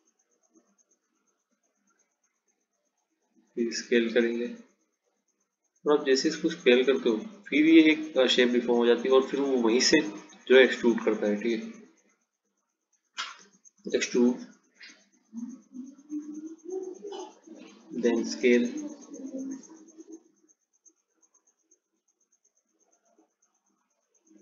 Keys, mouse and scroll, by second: 3.9 s, 8.3 click, 10.1 click, 11.2 s, 13.6 e, 18.6 s.